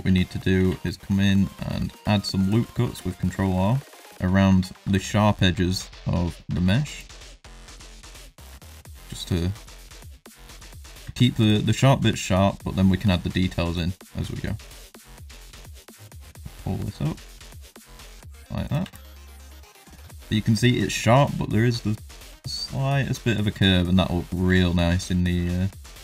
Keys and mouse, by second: 0.0 shift+middle click, 0.5 ctrl+r, 2.6 shift+middle click, 2.9 ctrl+middle click, 3.8 middle click, 4.9 middle click, 5.3 shift+middle click, 5.9 middle click, 6.5 ctrl+r, 8.5 ctrl+r, 10.2 middle click, 10.6 shift+middle click, 11.0 ctrl+r, 15.0 ctrl+r, 18.8 Tab, 18.9-19.9 middle drag, 20.1-20.6 ctrl+middle drag, 23.2 ctrl+middle drag, 23.6 middle drag, 24.3 shift+middle drag, 24.6 shift+middle drag, 24.9 middle drag, 25.5 shift+middle drag, 25.8 middle drag.